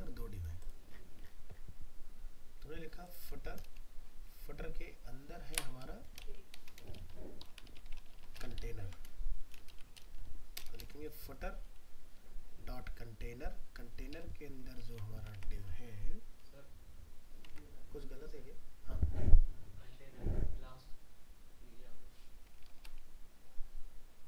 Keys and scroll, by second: 6.2 ctrl+shift+Right, 8.6 ctrl+Left, 14.8 ctrl+s, 15.4 alt+Tab, 22.7 ctrl+End.